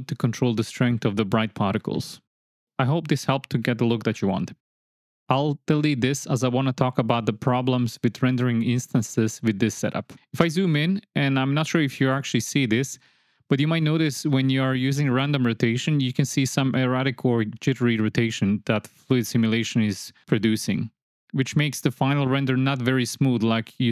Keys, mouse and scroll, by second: 1.1-1.7 drag, 2.2 drag, 3.6 ctrl+x, 4.1 click, 5.0 ctrl+x, 5.7 click, 7.8-8.7 drag, 10.1 space, 11.1 space, 12.2 space, 13.7 space, 14.4 space, 16.6-17.4 space, 18.1 space, 18.5 space, 18.9 space, 19.3 shift+drag, 20.3-20.7 shift+drag, 20.8 space, 21.8 space, 22.2 shift+middle drag, 22.9 space.